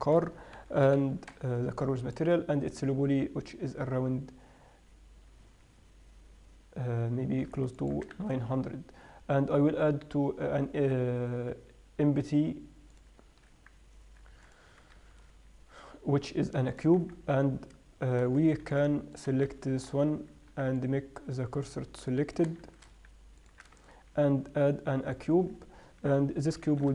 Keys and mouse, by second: 1.0 KP_7, 1.3 KP_3, 8.6 shift+a, 14.7 x, 15.4 shift+a, 19.1 x, 19.6-21.2 right drag, 19.9 shift+s, 23.0 shift+s, 24.1 shift+a, 26.5 KP_7.